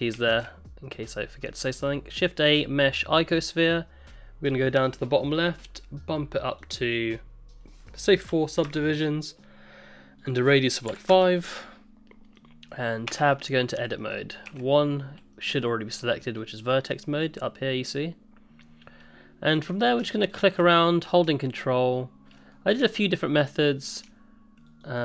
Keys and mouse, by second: 0.3 shift+a, 3.2-3.5 middle drag, 5.2 click, 6.6-9.6 drag, 10.2-11.9 drag, 12.3 click, 13.1 Tab, 14.0 click, 14.5 1, 15.3 click, 19.5 middle click, 20.7 middle click, 21.9 ctrl+click, 22.4 middle click, 23.2 ctrl+click, 23.5 middle click, 24.8 ctrl+click.